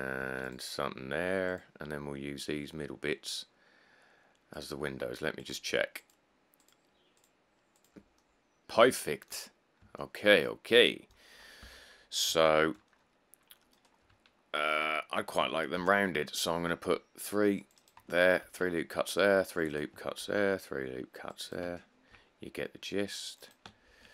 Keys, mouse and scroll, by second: 0.4 ctrl+r, 9.8 middle click, 10.0 middle click, 11.9 1, 12.1-12.5 scroll, 14.6 middle click, 14.7 middle click, 16.0 ctrl+r, 16.2-16.8 scroll, 16.8 scroll, 17.4 scroll, 18.7 ctrl+r, 18.9 scroll, 19.3 click, 20.4 ctrl+r, 20.8 click, 21.1 click, 22.1 ctrl+r, 22.8 click, 23.1 click, 24.0 ctrl+r.